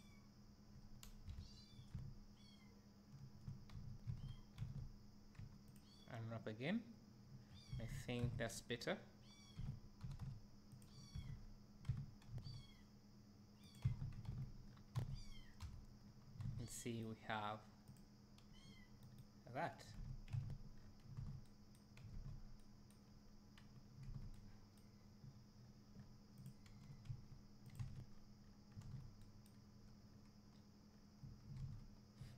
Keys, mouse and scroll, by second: 0.0 click, 1.3 KP_Decimal, 2.8 `, 4.1 a, 7.5-7.8 scroll down 2, 8.5 Tab, 9.6 r, 10.9 drag, 11.2 Tab, 11.5-11.8 scroll down 2, 11.9 Tab, 12.3 s, 14.2 Tab, 14.7 scroll down 1, 15.0 alt+a, 15.6 KP_1, 18.0 click, 18.5 g, 19.2 right click, 19.6 scroll down 1, 20.0 ctrl+s, 20.4 alt+a, 20.8 scroll up 1, 23.3 scroll down 1, 25.6 scroll up 1, 26.5 click, 27.0 g, 27.8 click, 28.0 alt+a, 28.2 scroll down 1, 30.0 scroll up 1, 30.9-31.5 scroll down 1.